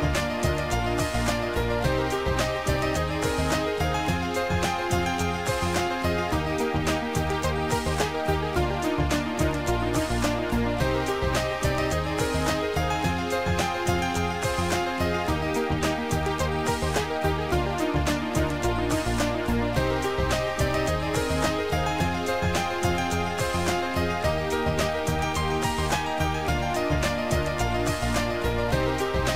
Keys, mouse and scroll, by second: 0.1 click, 2.0 click, 3.0 click, 6.3 click, 9.2 click, 10.3 Delete, 12.7 click, 13.5 Delete, 13.6 ctrl+click, 15.1 click, 17.9 shift+click, 22.7 click, 23.5 click, 25.0 shift+click.